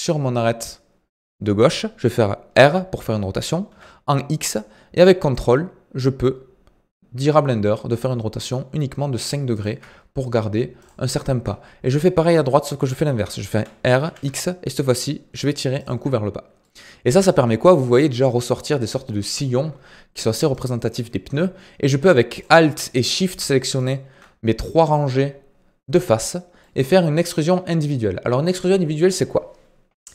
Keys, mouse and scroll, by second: 2.5 r, 10.8 alt+click, 13.5 r, 16.6 middle click, 17.3 scroll up 2, 20.5 click, 22.3 alt+click, 23.1 alt+shift+click, 23.7 alt+shift+click, 26.6-30.1 middle drag.